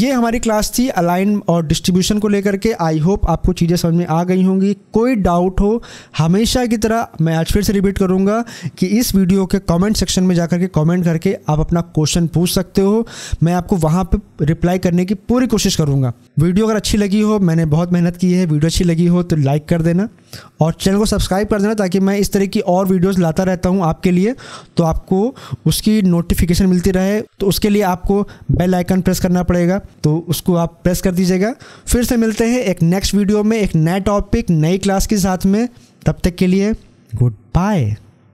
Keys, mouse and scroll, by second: 29.9 click.